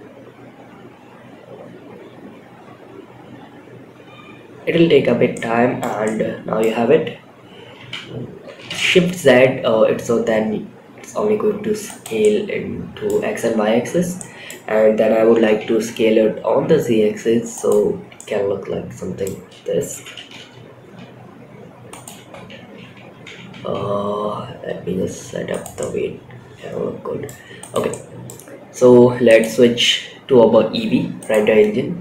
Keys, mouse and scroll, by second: 4.1 middle click, 4.1 scroll down 1, 4.6-5.1 middle drag, 5.3-5.9 middle drag, 7.1 s, 11.5-12.4 middle drag, 13.2 scroll down 2, 13.5-13.8 middle drag, 14.6 s, 17.2-17.5 scroll up 2, 17.5-18.6 middle drag, 19.3 s, 22.6 g, 25.1-26.6 middle drag, 26.9 click, 27.2-27.6 middle drag, 28.9 click, 31.9 click.